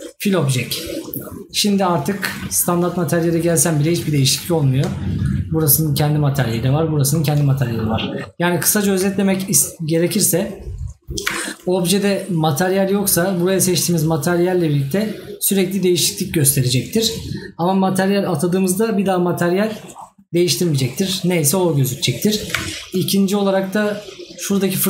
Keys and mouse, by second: 4.9 right click, 7.9 right click.